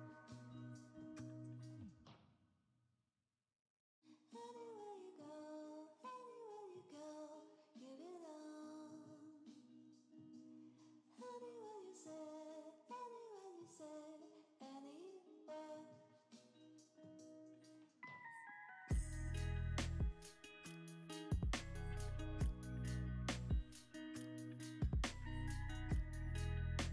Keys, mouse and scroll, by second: 0.0-1.1 typing, 1.5 Return, 1.6 Return, 4.6-4.9 typing, 5.5 Return, 10.8 right click, 12.8 Return, 13.8 ctrl+j, 19.6 shift+click, 21.5 shift+click, 21.8 ctrl+c, 22.6 ctrl+v, 24.4 Delete.